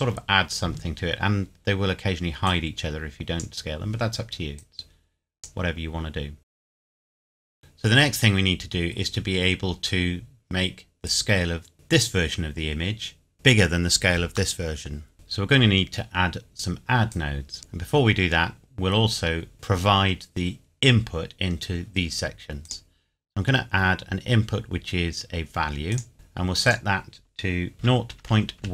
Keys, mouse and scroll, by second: 2.4 click, 7.1 scroll up 1, 7.5 scroll down 1, 7.6 scroll up 1, 10.3-10.6 scroll down 1, 11.0 click, 14.5 middle click, 17.1 click, 22.6 click, 25.9 click, 27.8 KP_0, 28.2 KP_Decimal, 28.6 KP_1.